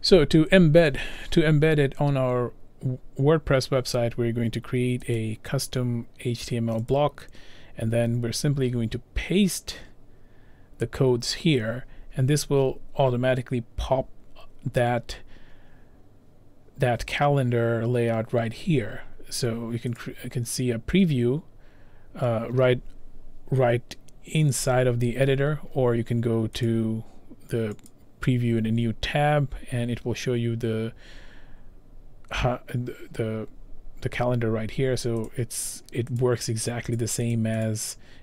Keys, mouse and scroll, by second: 5.3 click, 7.1 click, 8.6 ctrl+v, 20.2 click, 21.5-23.1 scroll down 2, 26.8 click, 28.0 click, 31.7 scroll, 31.8 scroll down 4, 32.2-32.6 scroll, 35.4 click, 35.4-35.8 scroll, 35.8 click, 36.3 click, 37.1 click, 37.4 click, 37.8 click, 38.0 click.